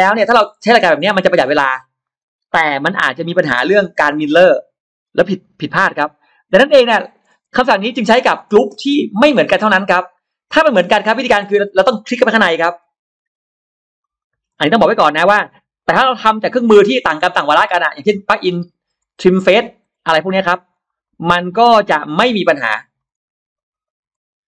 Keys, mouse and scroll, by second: 0.1 scroll down 1, 0.7 middle click, 1.5 scroll up 2, 1.9 middle click, 6.5 ctrl+z, 6.8 middle click, 7.0 middle drag, 7.3 space, 7.5 click, 7.9 middle click, 8.5 middle click, 9.6 click, 10.5 scroll up 1, 10.7 middle click, 10.8-11.2 scroll down 2, 12.0 click, 12.1 click, 12.4-12.7 middle drag, 13.0 Escape, 13.0 click, 13.2 click, 13.7 Escape, 13.9 click, 14.0 click, 14.5 Escape, 14.7 click, 14.9 click, 15.0 click, 15.6 click, 15.7 Escape, 15.8 click, 16.5 click, 16.7 click, 17.4 Escape, 17.4 click, 17.6 click, 18.2 click, 18.4 click, 18.7 Escape, 19.2 click, 19.3 click, 19.8 Escape, 19.9 click, 20.1 click, 20.2 click, 20.7 click, 21.0 click, 21.4 Escape, 21.6 click, 21.7 click, 21.9 click, 22.5 click, 22.7 click, 22.8 click, 23.4 click, 23.6 click, 23.7 click, 24.4 Escape, 24.4 click.